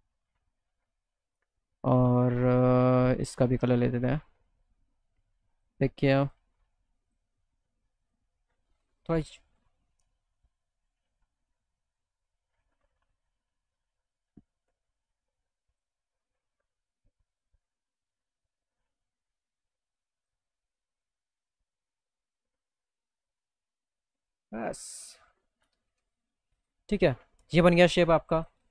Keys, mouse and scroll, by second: 4.2 click, 5.6 super+click, 6.3 super+click, 7.1 super+click, 8.1 super+click, 9.5 click, 14.6 click, 17.5 click, 22.2 click, 23.8 click, 24.5 middle click, 25.1 alt+middle click, 25.7 middle click, 26.4 middle click, 28.4 click.